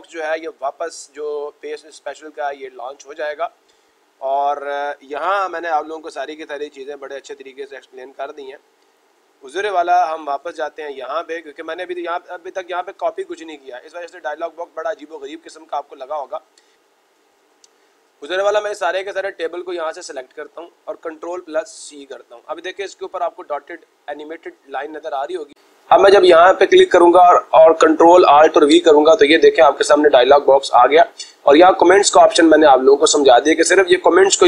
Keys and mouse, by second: 7.8 click, 8.7 click, 10.7 click, 13.8-15.0 drag, 16.7-17.7 drag, 20.4 click, 21.6 ctrl+c, 26.2-27.2 drag.